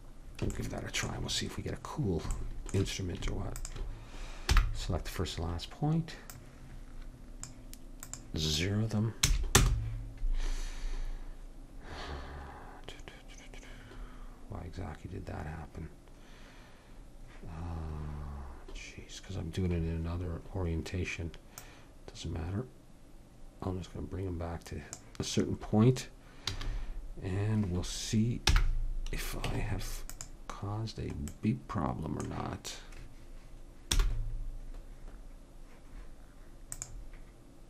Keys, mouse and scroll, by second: 3.6 click, 3.6 right click, 4.6 n, 7.8-13.7 drag, 21.6-23.5 drag, 26.6 a, 28.5 n, 29.5 Tab, 34.0 t, 36.8-37.6 drag.